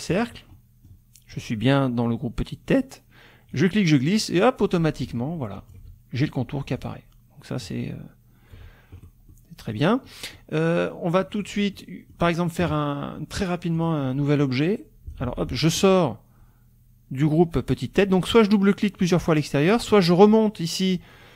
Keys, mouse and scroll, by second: 0.1 click, 0.5 click, 3.5-5.9 drag, 6.8-8.7 ctrl+drag, 9.3 middle click, 9.3-9.9 scroll up 1, 10.1 click, 11.4 click, 11.7 click, 11.8 middle click, 11.8-12.7 scroll up 1, 13.8 click, 14.4 click, 15.2 ctrl+z, 19.6-20.3 scroll up 4.